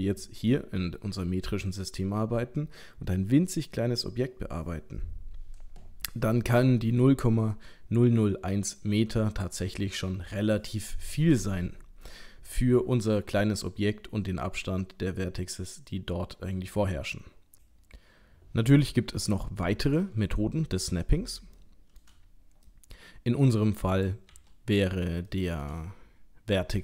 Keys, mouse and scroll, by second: 20.2-20.8 scroll down 2, 20.8 middle click, 21.6 shift+middle click, 22.2-22.7 scroll down 2, 22.7 middle click, 23.3 middle click, 23.9 click, 24.3 l, 25.3 shift+middle click, 25.6 shift+middle click.